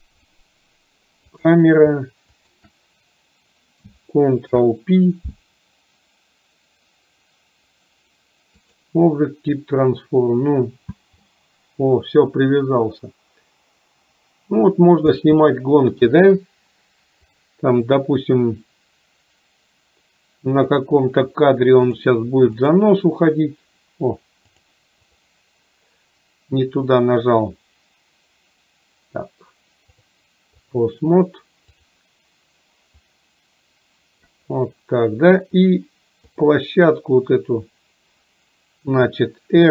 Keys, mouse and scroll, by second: 1.5 click, 17.4 click, 18.0 click, 20.7 click, 21.9 click, 24.7 click, 30.0 click, 31.9 click, 33.1-34.4 drag.